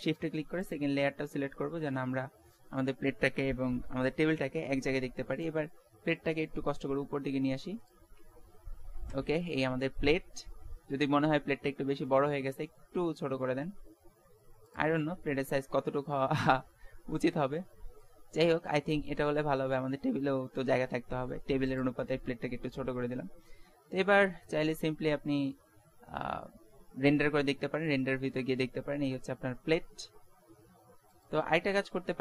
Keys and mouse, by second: 1.6 middle click, 3.4-5.2 middle drag, 5.5-7.3 drag, 8.1 z, 9.1 z, 11.9 s, 15.7-18.3 middle drag, 20.4 s, 23.5 shift+z, 27.5 middle click, 28.9 middle click, 30.8 ctrl+s.